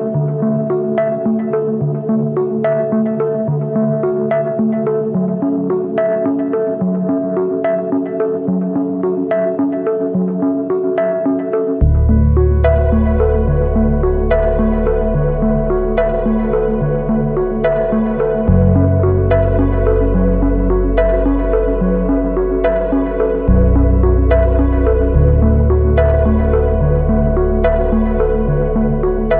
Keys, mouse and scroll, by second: 2.9 ctrl+click, 5.1 ctrl+click, 12.1 ctrl+Return, 16.6 alt+BackSpace, 18.4 ctrl+d.